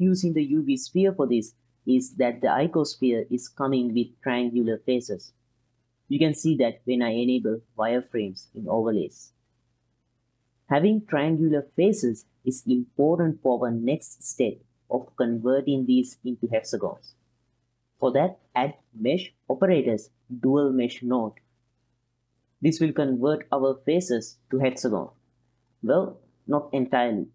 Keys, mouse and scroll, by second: 2.9-3.4 ctrl+drag, 4.8-9.4 drag, 9.8-12.6 middle drag, 13.5 click, 14.5 click, 17.7 shift+a, 23.8-24.6 ctrl+drag, 25.2 click, 25.3-27.3 middle drag.